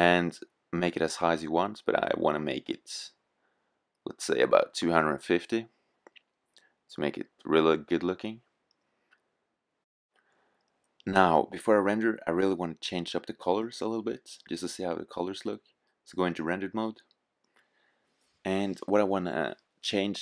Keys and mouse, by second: 0.8-2.4 drag, 7.1-8.9 drag, 14.4-20.2 drag.